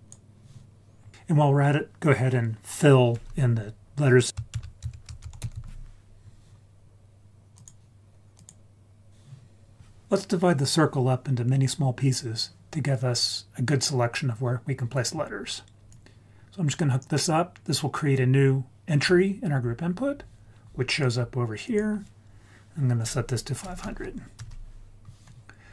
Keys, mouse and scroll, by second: 0.9 scroll down 2, 1.1 click, 4.3 shift+s, 4.5 shift+a, 5.5 l, 15.9 click, 16.8 click, 21.6-24.4 drag, 23.8 0.